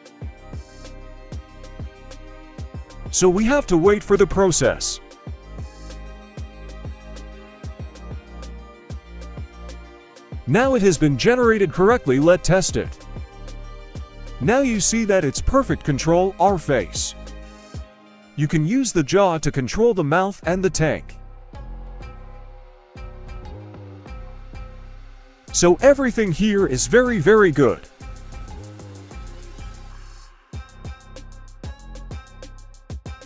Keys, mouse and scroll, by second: 9.1-10.4 scroll up 1, 10.4-11.2 drag, 10.4-11.2 scroll up 2, 11.7 right click, 12.1 right click, 12.8 middle click, 13.0 scroll down 1, 13.3 g, 15.2 middle click, 15.4-15.8 scroll up 1, 16.4 right click, 17.2 r, 19.2 middle drag, 19.6 scroll up 1, 20.0 shift+middle drag, 20.3-21.1 middle drag, 21.5 right click, 22.1 middle click, 22.5 g, 23.6 middle drag, 24.0 g, 25.0 middle click, 25.5 g, 27.2 right click, 27.6 g, 28.4 scroll down 1, 28.6 middle click, 29.0 scroll down 1, 29.3 middle click, 29.7 right click, 30.0 g, 31.1 right click, 31.3 g, 32.1-32.7 scroll up 1, 32.7-33.0 scroll up 1, 33.0 a.